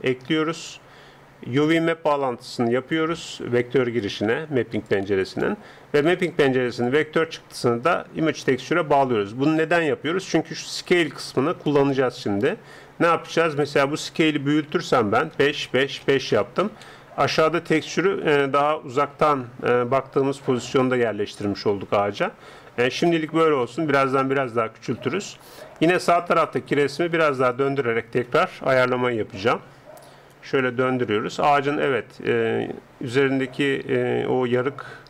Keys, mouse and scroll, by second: 1.7-3.9 drag, 4.1-6.7 drag, 6.9-9.0 drag, 11.5-13.6 middle drag, 13.6-15.3 drag, 17.9-21.5 middle drag, 22.4-27.5 middle drag, 27.5-29.7 drag, 29.7 r.